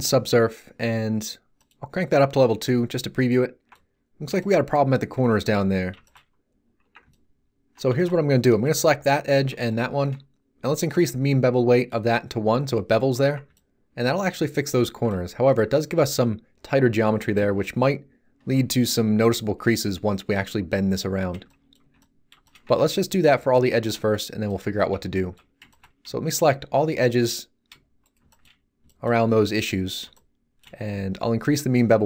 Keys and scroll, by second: 5.1 z, 6.8 Tab, 12.4 z, 13.2 Tab, 15.1 z, 21.8 z, 22.6 Tab.